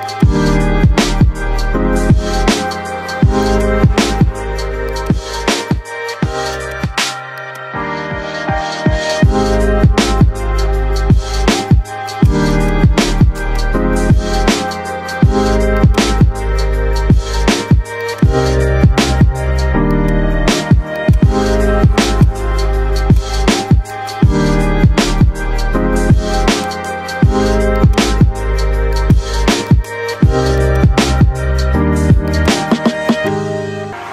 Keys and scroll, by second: 3.9 F3, 4.4 Escape, 7.9 Delete, 18.8 shift+Page_Up, 20.1 shift+F2, 20.4 Escape.